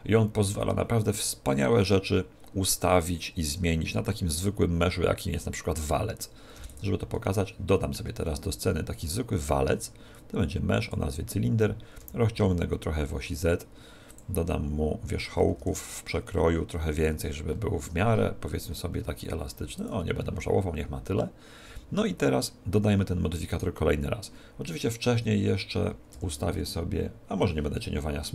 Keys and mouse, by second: 6.5 x, 7.2-9.1 middle drag, 8.1 shift+a, 9.3 shift+a, 12.0 s, 14.1 click, 15.2 Tab, 15.5 ctrl+r, 15.9 middle click, 19.9 click, 21.7 Tab, 23.5 right click, 26.2 t.